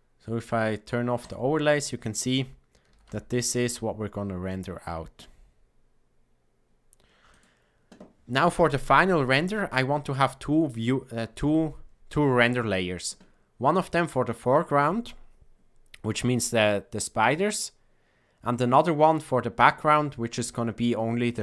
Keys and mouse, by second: 1.1 click, 2.8 a, 3.0 a, 7.2 click.